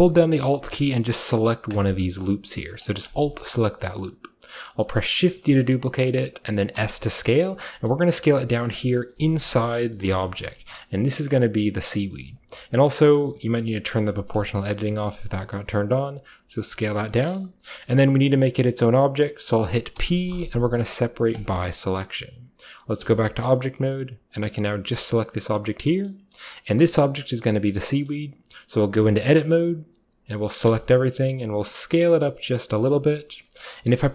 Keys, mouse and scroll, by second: 0.4-3.6 middle drag, 3.6 typing, 3.8-4.4 scroll up 1, 4.4 middle click, 4.4-5.2 scroll down 1, 4.7-6.8 middle drag, 5.2-6.8 scroll down 1, 5.3 d, 6.8 s, 7.5 click, 7.9-8.7 scroll up 1, 8.2 s, 8.7-10.2 middle drag, 9.7 KP_5, 10.2-11.9 scroll up 1, 10.7-13.9 shift+middle drag, 11.0 s, 11.9-12.7 shift+scroll up 1, 12.7-13.9 shift+scroll up 1, 14.3-17.1 drag, 17.1-21.3 middle drag, 21.3-23.0 drag, 23.0 Tab, 24.8 g, 25.6-27.9 middle drag, 27.9-29.0 scroll up 1, 29.0 Tab, 29.0-29.6 scroll up 1, 29.2 middle click, 30.7 a, 31.2 s, 33.0 click.